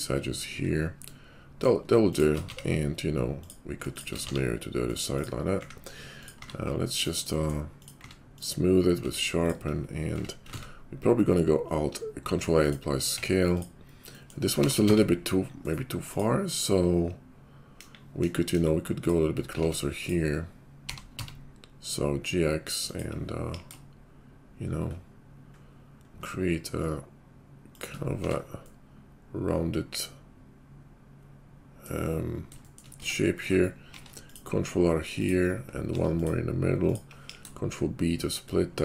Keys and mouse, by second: 2.4 x, 4.3 alt+x, 4.9 click, 5.0 middle click, 5.1 click, 5.2 middle click, 5.6 `, 6.1-7.9 drag, 7.9-9.4 middle drag, 8.0 q, 9.0 Tab, 9.4 click, 9.4-13.6 middle drag, 10.1 Tab, 10.5 ctrl+a, 13.0 Tab, 13.6-18.9 drag, 17.7 KP_5, 18.1 KP_5, 18.4 KP_5, 18.9 middle click, 19.6 Tab, 19.9 click, 20.1-32.9 middle drag, 20.9 g, 23.4 ctrl+b, 28.2 Tab, 32.9 Tab, 33.8 ctrl+r, 35.8 ctrl+r, 37.2 ctrl+b.